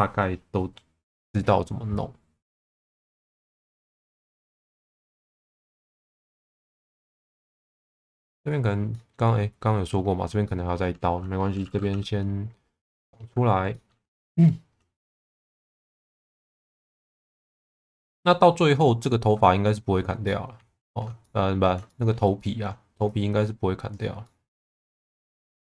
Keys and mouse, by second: 2.5 middle click, 3.3 3, 6.7 2, 6.9 click, 8.1 middle click, 8.9 middle click, 10.4 middle click, 11.9 e, 12.9 click, 13.7 middle click, 14.3 1, 15.3 shift+middle click, 16.0 g, 16.1 b, 17.0 click, 17.7 click, 18.0-19.3 middle drag, 20.0 click, 20.2 middle click, 21.2 middle click, 21.9 shift+middle click, 22.4 middle click, 23.1 click, 24.2 middle click.